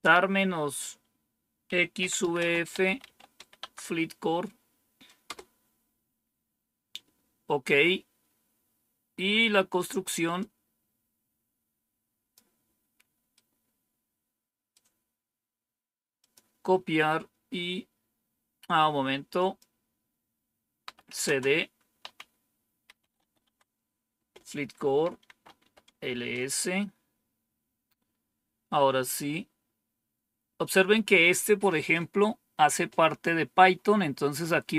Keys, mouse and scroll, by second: 0.0-3.7 typing, 5.1 Return, 10.3-12.2 drag, 13.2-14.6 right drag, 16.1 click, 19.2 click, 20.5-25.6 typing, 24.0 Return, 25.9 Return.